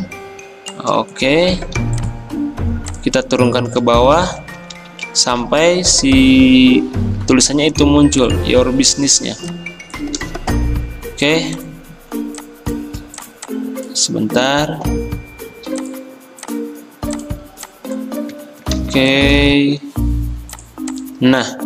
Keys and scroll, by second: 3.9 ctrl+[, 4.2 ctrl+[, 10.2 d, 18.8 ctrl+g.